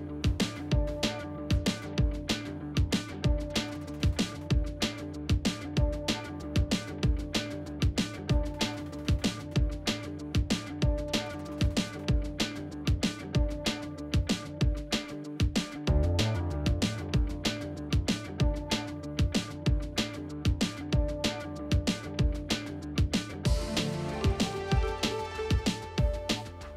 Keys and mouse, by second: 0.5 KP_1, 1.0 shift+middle click, 1.2 alt+z, 1.6 shift+middle click, 1.9 g, 2.6 middle click, 3.1 middle click, 3.9 click, 4.8 alt+z, 4.9 middle click, 5.4 s, 9.0 middle click, 9.7 alt+z, 10.4 middle click, 10.7 shift+click, 11.0 alt+z, 11.1 middle click, 11.8 e, 13.9 middle click, 14.5-14.9 drag, 15.3 middle click, 16.4 middle click, 16.9-17.9 drag, 18.0 middle click, 19.1 Tab, 19.3-19.8 middle drag, 20.7 Tab, 20.8 Tab, 21.1-21.5 middle drag, 22.6 click, 22.9 right click, 23.5 middle drag, 23.9 middle drag, 24.3 Tab, 24.4 middle click, 24.7 1, 25.1 click, 25.6 g, 26.6 g.